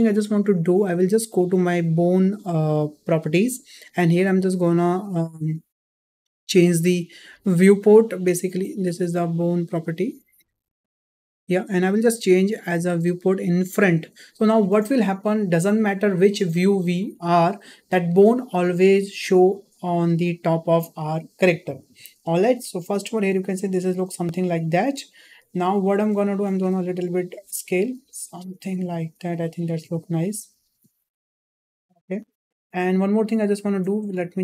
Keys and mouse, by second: 4.0 drag, 5.2 click, 6.6 drag, 8.5 click, 13.7 click, 22.8-23.1 shift+middle drag, 25.7 shift+middle click, 26.7 s, 29.8 Tab, 30.6 Tab, 31.7 s.